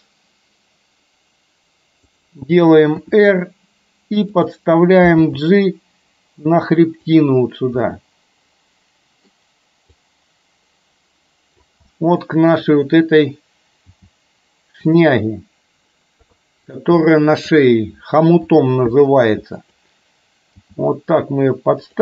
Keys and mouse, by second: 3.0 r, 5.3 g, 7.9-9.4 middle drag, 10.3-11.6 drag, 11.9 middle click, 14.0 g, 16.3 KP_3, 17.1 shift+middle click, 18.5 r, 20.6 g.